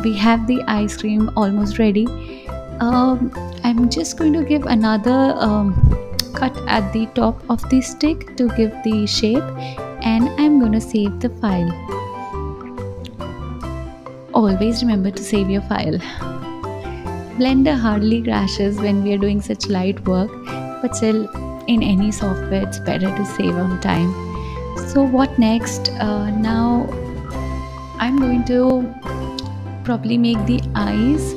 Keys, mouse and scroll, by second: 0.2 KP_1, 0.8 click, 1.9-2.4 scroll up 2, 2.8 click, 3.9-5.4 drag, 5.4 ctrl+r, 8.0-8.9 drag, 9.1-10.1 scroll down 2, 10.1 ctrl+s, 17.4 click, 29.7 alt+z.